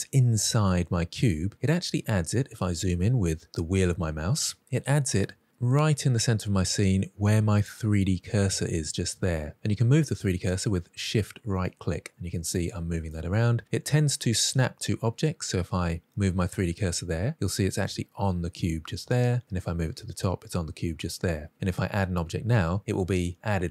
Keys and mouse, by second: 5.6-6.7 middle drag, 8.8-9.5 middle drag, 11.3 shift+right click, 11.9 shift+right click, 12.9 shift+right click, 15.6 shift+right click, 17.1-18.7 middle drag, 19.4 shift+middle click, 19.9-21.5 middle drag.